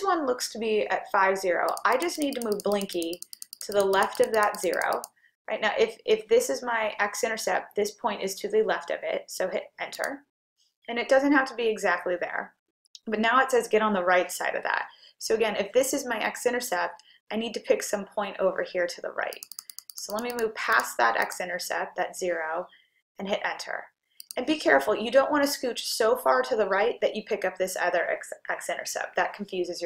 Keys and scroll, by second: 1.7 Right, 1.9-3.6 typing, 2.7 Right, 3.6 Right, 3.8 Right, 4.0 Right, 4.3 Right, 4.4 Right, 4.6 Right, 4.8 Right, 5.0 Right, 10.0 Return, 19.3 Right, 19.6 Right, 19.9 Right, 20.2 Right, 20.4 Right, 20.8 Right, 21.3 Right, 24.3 Return.